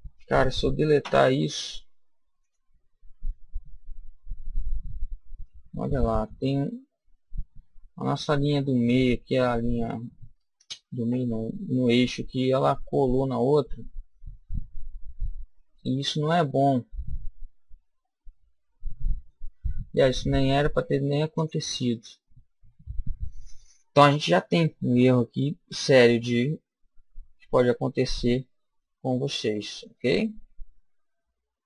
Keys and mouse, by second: 1.0 Delete, 3.3-5.2 middle drag, 5.4-9.5 middle drag, 11.1 ctrl+z, 12.6 middle click, 13.5 click, 13.6 middle click, 13.7 click, 21.4 click, 22.9 KP_1, 25.1-27.1 middle drag.